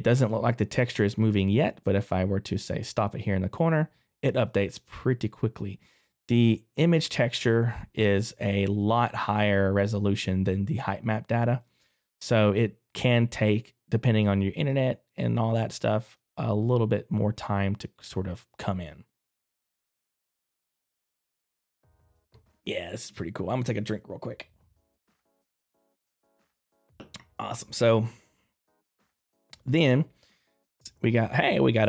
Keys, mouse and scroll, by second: 4.4 click, 4.4 right click, 5.3 click, 15.8 middle click, 17.9 click, 29.3 middle click, 30.8 right click, 31.3 middle click.